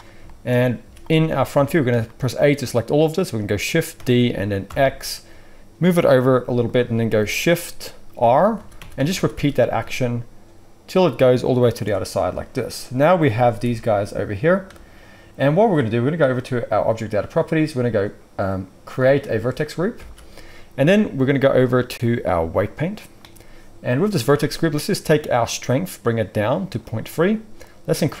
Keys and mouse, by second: 0.8 z, 1.5 a, 3.9 shift+d, 8.2-9.7 typing, 11.7 shift+r, 12.6-14.6 drag, 13.3 g, 14.6-19.0 middle drag, 19.0-28.2 drag, 19.9 alt+a.